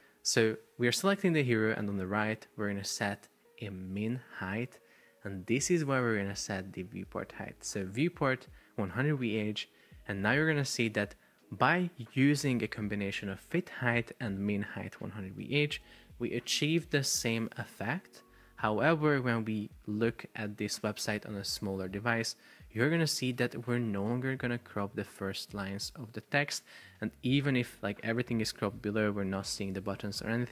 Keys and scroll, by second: 16.0 super+p.